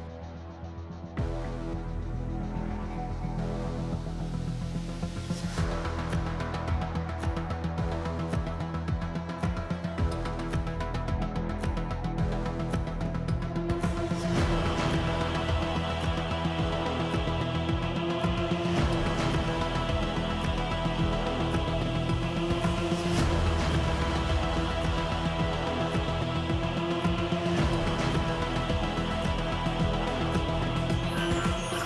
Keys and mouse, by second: 0.0-1.5 typing, 1.5 click, 1.7 middle click, 2.5 click, 3.3 KP_1, 10.3 shift+drag, 11.2 KP_7, 11.9 Delete, 12.2 shift+a, 14.0-16.5 typing, 15.8 Tab, 17.6 click, 18.0 shift+click, 18.4 g, 20.2 x, 20.3 x, 20.5 Tab, 21.2 shift+drag, 21.5 Tab, 22.0 click, 22.4 a, 23.3 click, 24.3-25.5 drag, 26.7 shift+click, 27.1 Tab, 27.5 Tab, 28.8 g, 30.4 x, 30.5 x, 30.7 Tab, 30.7 x, 31.1 z, 31.7-31.8 middle drag.